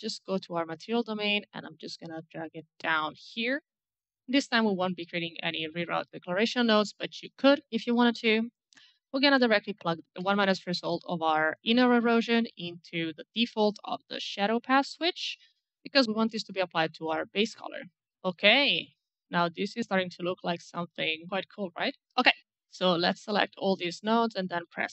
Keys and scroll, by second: 21.9 alt+Delete, 23.8 c.